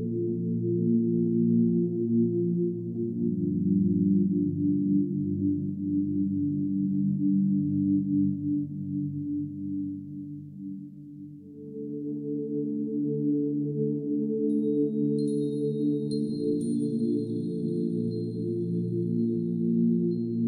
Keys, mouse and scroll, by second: 0.0 click, 0.2-2.3 typing, 0.7 click, 0.8 click, 2.2 click, 2.5 click, 2.7 ctrl+s, 3.1 click, 3.2 scroll up 2, 3.2 click, 3.3 shift+middle click, 3.3 scroll down 1, 4.0 click, 4.0-9.3 typing, 4.1 click, 4.1 middle click, 4.4 scroll up 2, 5.1 scroll down 6, 5.2 click, 5.4-6.0 scroll up 6, 5.6 click, 5.8 click, 5.9 shift+middle click, 6.9 click, 7.0 click, 7.1 middle click, 7.1 click, 7.1 middle click, 7.3 click, 9.8 middle click, 9.9 scroll down 1, 10.0 click, 10.1 click, 10.3 middle click, 10.4 scroll up 1, 10.5 click, 11.0 scroll down 2, 11.1 middle click, 11.3 scroll up 2, 11.4 click, 11.5 click, 11.6 right click, 11.7 middle click, 11.9 scroll up 1, 11.9-15.6 typing, 12.0 middle click, 12.2 click, 12.3 shift+middle click, 13.1 click, 13.1 middle click, 13.2 middle click, 14.2 click, 15.4 click, 15.8 middle click, 15.9 scroll down 2, 15.9 middle click, 16.1 scroll up 1, 16.2 shift+middle click, 16.3 click, 16.7-19.2 typing, 17.2 right click, 17.3 scroll up 2, 17.4 click, 17.8 click, 18.6 click, 18.6 middle drag, 18.7 scroll down 2, 18.9 middle click, 19.2 click, 19.4 middle click, 19.5 scroll up 2, 19.5 shift+middle click, 19.9 shift+click, 20.0 middle click, 20.3 click, 20.4 click.